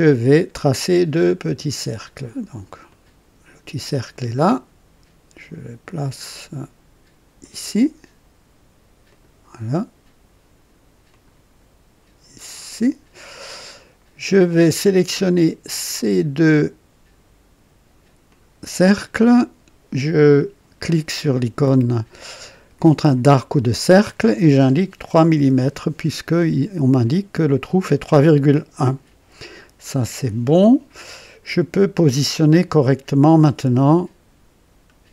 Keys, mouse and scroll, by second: 2.8 click, 7.3 click, 9.0 click, 11.0 click, 12.4 click, 13.2 right click, 15.6 click, 18.2 click, 23.3 click, 25.0 KP_3, 25.3 KP_Enter, 29.4 scroll up 2.